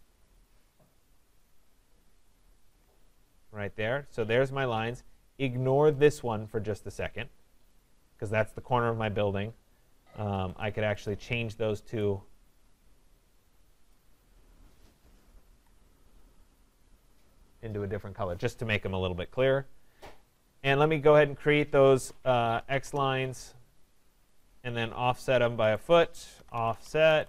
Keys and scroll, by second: 15.4 Escape, 22.8 Return.